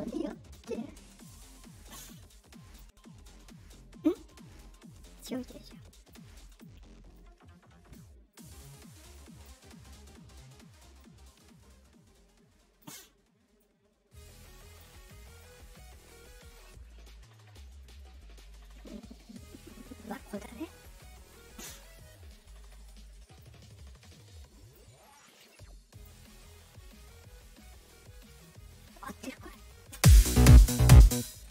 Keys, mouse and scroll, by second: 0.2 click, 1.0 click, 1.9 click, 5.3 click, 5.6 click, 6.4 click, 7.1 click, 8.3 click, 9.1 click, 10.9-12.7 drag, 13.5-14.7 drag, 15.3-20.0 drag, 23.3-24.7 drag, 25.4 click, 28.3 click, 29.9 space, 31.0 space, 31.4 space.